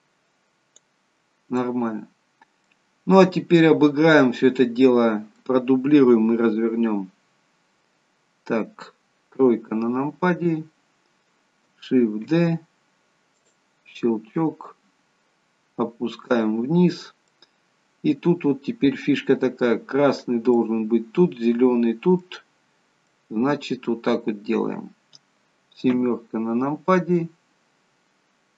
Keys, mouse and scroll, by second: 1.6 middle click, 2.8-4.5 scroll down 2, 3.3 middle click, 9.3 KP_3, 12.1 shift+d, 14.6 click, 17.3 middle click, 20.5 middle click, 23.1 middle click, 25.9 KP_7, 28.3-28.5 scroll down 1.